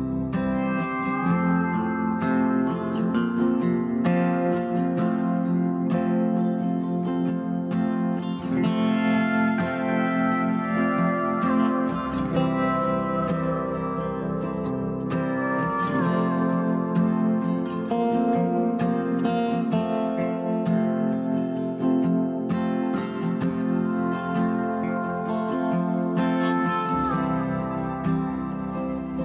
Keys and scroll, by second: 3.1 ctrl+=, 28.7 ctrl+j.